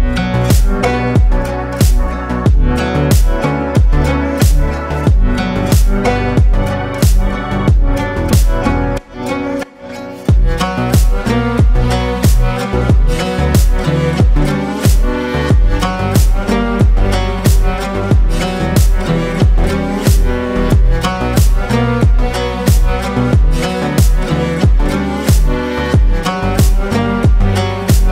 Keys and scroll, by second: 15.9 ctrl+space, 21.3 ctrl+space, 21.9 ctrl+space, 22.5 ctrl+space.